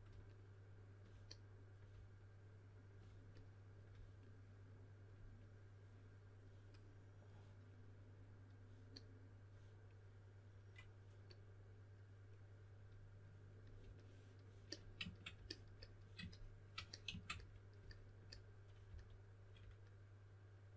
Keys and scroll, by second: 0.0-0.1 typing, 18.8 s.